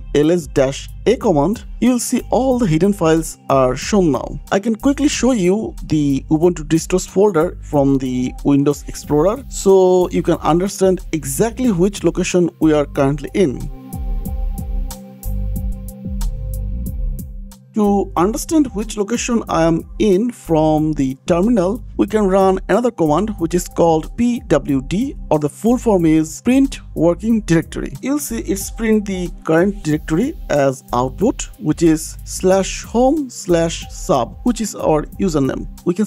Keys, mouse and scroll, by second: 2.2-3.6 typing, 8.2 click, 10.3 click, 10.7 click, 13.1 shift+click, 13.7 click, 15.9 click, 16.0 click, 16.9 scroll down 1, 17.7 click, 17.9 click, 19.5 click, 19.5 click, 21.3 click, 23.0-24.3 typing, 24.4 Return, 28.3 click, 34.3 click, 35.4 click, 35.6 click.